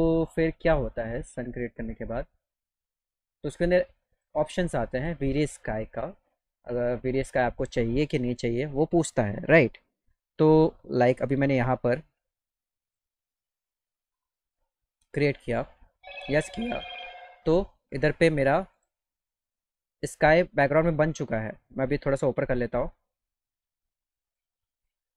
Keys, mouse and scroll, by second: 7.2 ctrl+click, 9.3 middle click, 10.3-12.9 drag, 14.4 click, 24.8 ctrl+click.